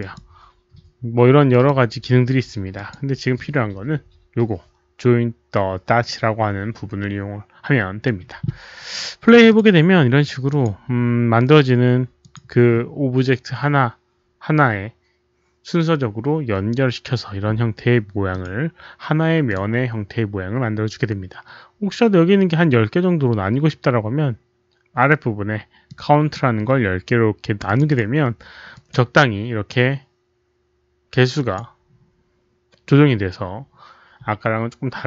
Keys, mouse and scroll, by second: 1.4 click, 2.7 click, 5.5 click, 7.6 click, 9.2 click, 9.4 click, 10.4 click, 11.1 click, 12.1 click, 16.2 click, 18.2 click, 19.2 click, 19.5 click, 20.0 click, 21.5 click, 25.8 click, 27.6 click, 27.8 click, 28.6 click, 29.7 click, 30.8 click, 31.4 click, 34.8 click.